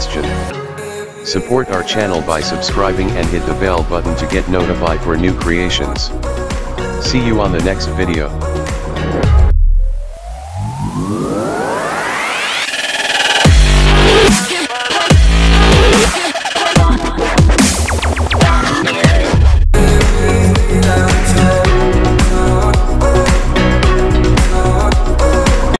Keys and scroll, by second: 5.5 ctrl+s.